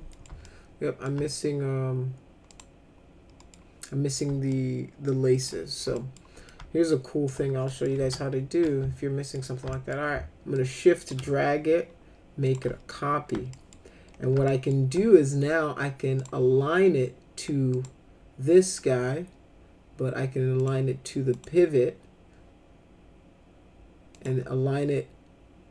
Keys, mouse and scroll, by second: 0.1 middle click, 0.4 alt+middle click, 2.5 click, 3.4 middle click, 4.5 alt+middle click, 5.9 alt+middle click, 6.4 alt+middle click, 7.7 middle click, 8.0 F3, 8.6 alt+middle click, 9.7 alt+middle click, 10.5 shift+click, 12.4 click, 12.9 alt+middle click, 13.5 middle click, 14.5 alt+middle click, 16.1 click, 17.7 click, 20.6 click, 21.3 click, 24.1 click.